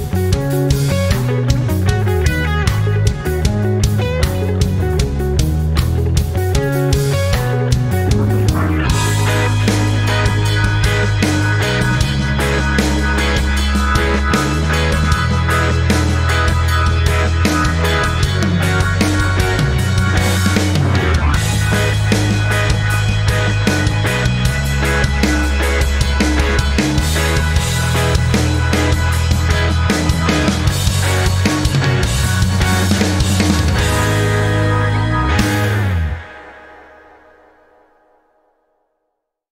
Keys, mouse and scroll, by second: 0.3-0.7 scroll up 2, 2.7 click, 4.2 ctrl+scroll down 1, 5.7 z, 6.3-8.8 drag, 8.8 v, 9.4-11.4 drag, 11.4 ctrl+scroll up 1, 12.7 ctrl+scroll down 1, 13.7-15.5 drag, 19.8 ctrl+g, 23.5 ctrl+g, 23.8 ctrl+z, 25.3 click, 30.5 click, 33.9 click, 34.7-37.6 typing, 34.8 click, 36.7 click, 37.4 click, 38.1 ctrl+c, 38.1 ctrl+v, 38.3 click, 38.8-39.5 typing, 39.4 click.